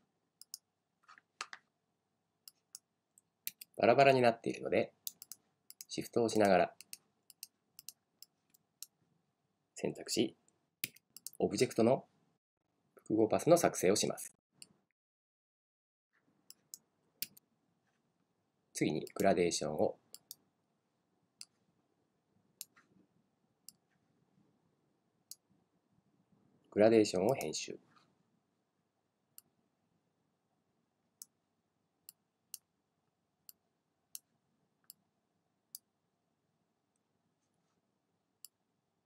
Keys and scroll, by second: 3.5 super+z, 10.9 super+z, 17.3 super+z.